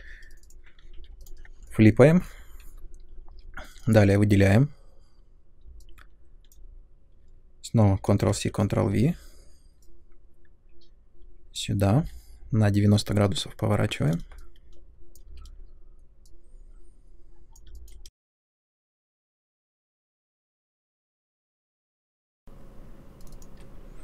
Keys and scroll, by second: 0.9 f, 3.3 2, 8.0 ctrl+c, 8.3 ctrl+v, 8.8 w, 11.9 e, 15.3 w, 18.0 ctrl+z, 19.6 w, 21.4 space.